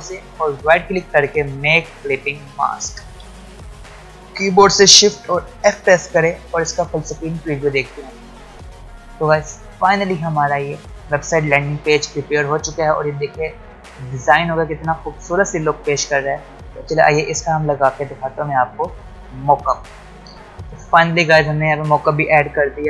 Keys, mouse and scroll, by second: 0.2 space, 0.5 right click, 2.1 click, 4.9 shift+Num_Lock, 4.9 click, 5.5 shift+f.